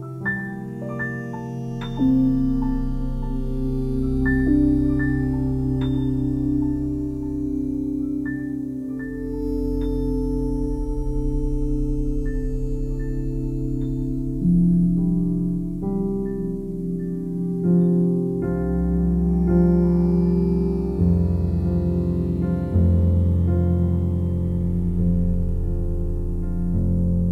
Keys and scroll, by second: 9.1 c, 20.8 c.